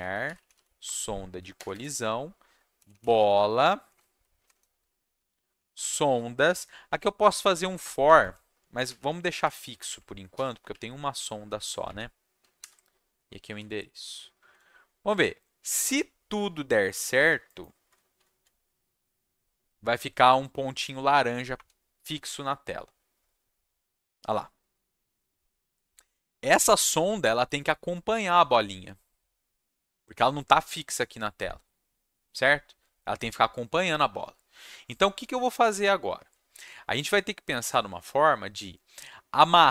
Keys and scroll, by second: 0.0-6.5 typing, 8.2 Left, 8.6-10.3 typing, 10.7 Left, 11.8 Left, 12.6 shift+7, 13.4 ctrl+s, 21.1 Up, 21.5 Return.